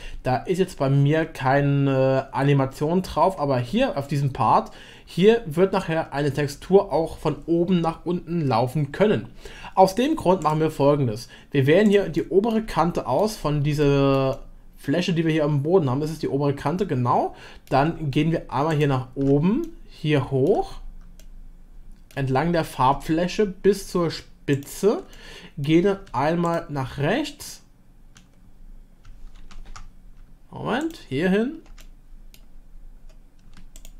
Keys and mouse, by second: 10.4-11.9 drag, 12.2 middle click, 12.7 shift+middle click, 13.9 middle click, 14.3-17.6 shift+middle drag, 18.7 ctrl+click, 19.6 shift+click, 20.5 shift+middle click, 21.2 shift+click, 25.1 middle click, 29.4 ctrl+z, 31.8-33.5 middle drag.